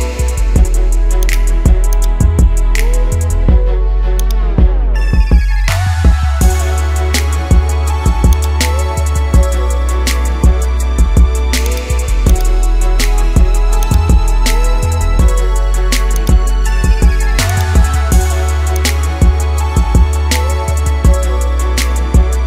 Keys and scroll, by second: 6.3 ctrl+z, 14.9 ctrl+z, 21.2 ctrl+z.